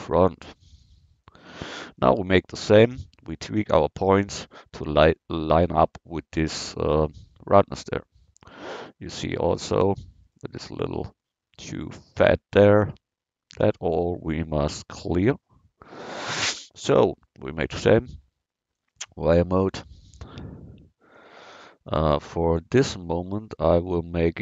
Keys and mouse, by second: 2.0-2.6 middle drag, 2.8-4.8 middle drag, 20.8-24.4 middle drag.